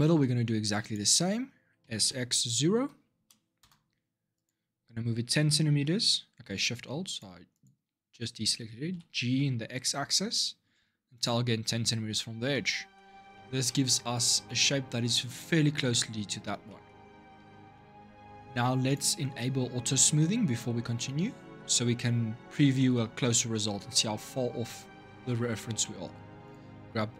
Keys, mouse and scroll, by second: 1.6 s, 3.4 \, 4.1 click, 6.3 click, 6.9 alt+shift+click, 7.3 alt+shift+click, 8.7 g, 12.3 middle click, 12.8-13.1 scroll down 1, 13.1 shift+middle click, 13.9 Tab, 14.2 middle click, 15.2 scroll down 2, 16.4 middle click, 16.9-17.5 scroll up 1, 17.5-18.6 shift+middle drag, 18.6 click, 22.5-25.5 shift+middle drag, 25.6-26.2 shift+middle drag, 26.2 click.